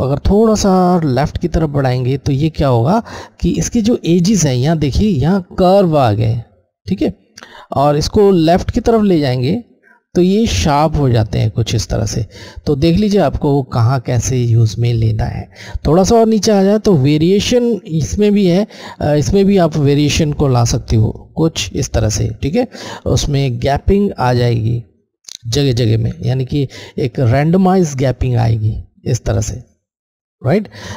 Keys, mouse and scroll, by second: 0.0 click, 8.2 click, 19.9 click, 23.1 click, 28.1 click.